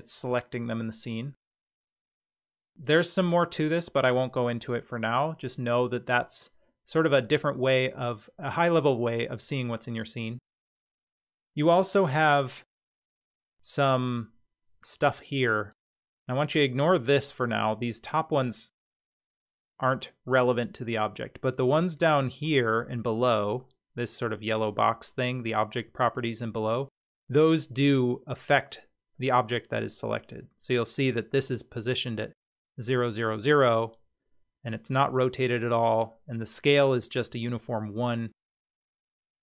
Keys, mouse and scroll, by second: 29.1 click.